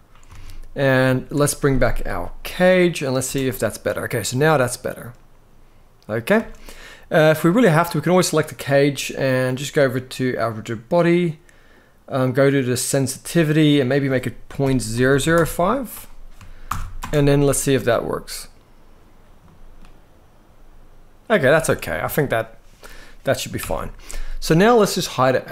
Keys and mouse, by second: 0.1 alt+a, 2.9 space, 6.1 space, 6.5-7.1 middle drag, 7.7 click, 13.5-15.0 drag, 14.8 0, 16.4 shift+Left, 16.7 space, 19.2-19.5 middle drag, 21.0 space, 21.7 alt+a, 23.3 shift+Left.